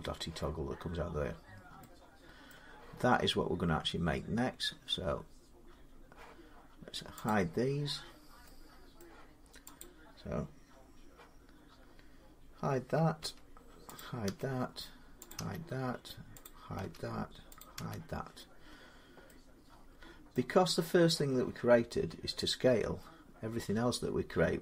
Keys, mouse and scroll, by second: 2.0-7.0 middle drag, 7.1 click, 7.6-8.2 scroll down 9, 8.8 middle click, 8.8-9.6 scroll up 9, 9.6 click, 13.0 h, 13.8 click, 14.1 h, 15.1 click, 15.2 h, 16.2 click, 16.6 h, 17.4 click, 17.6 h, 18.6-19.0 scroll, 20.1 middle click, 21.7 middle click.